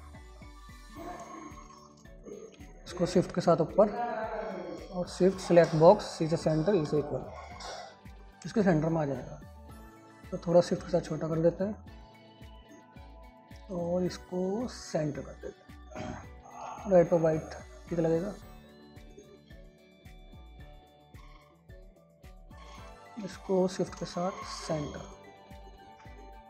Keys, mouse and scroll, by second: 20.4-23.6 drag, 24.9 c, 25.4-26.4 drag.